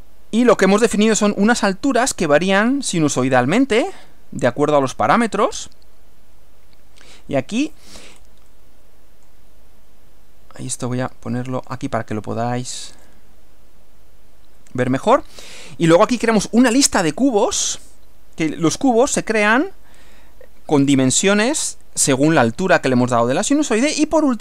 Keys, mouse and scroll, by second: 0.1 middle click, 4.9-7.9 drag, 8.2 scroll down 1, 8.5-9.5 middle drag, 10.6-11.9 drag, 13.0 click, 17.1 click, 24.3 click.